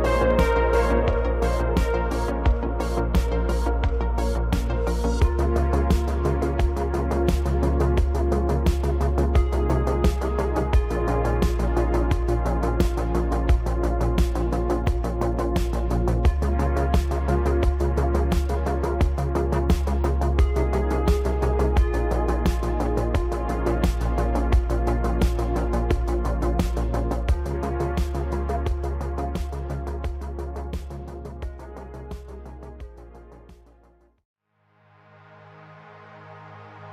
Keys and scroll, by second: 3.1 Tab, 8.8 2, 9.9 e, 13.3 s, 14.2 g, 14.4 z, 15.4 ctrl+r, 18.2 2, 19.4 s, 27.2 2, 28.1 s, 29.6 shift+z, 33.6 Tab.